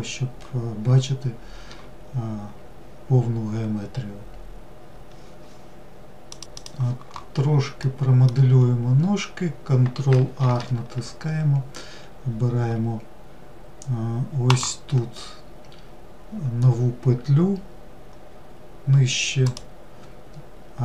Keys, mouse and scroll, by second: 0.5-0.9 scroll down 2, 7.2-8.0 middle drag, 8.0-9.3 scroll up 2, 9.7 ctrl+r.